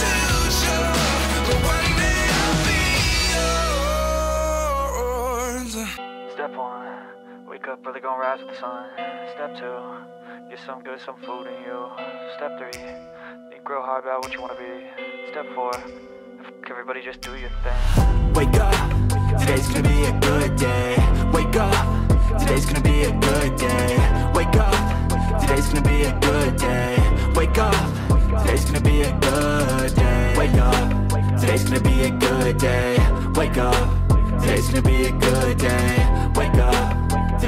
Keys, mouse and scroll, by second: 3.3 Tab, 4.1 click, 4.6 w, 5.5 click, 6.9 middle click, 7.1 r, 7.7 g, 8.0 middle click, 8.4 click, 8.6 middle click, 10.3 click, 15.7 click, 15.9 Tab, 16.8 click, 17.8 click, 18.5 click, 18.8 alt+shift+click, 19.7 click, 20.4 e, 20.7 s, 21.9 click, 22.9 e, 23.9 click, 24.6 click, 25.3 Tab, 25.6 Tab, 25.8 Tab, 26.7 r, 27.5 click, 28.0 Tab, 28.7 g, 29.0 middle click, 30.1 click, 30.7 click, 31.2 Tab, 31.9 middle click, 34.3 middle click, 34.7 s, 35.9 click, 36.1 middle click.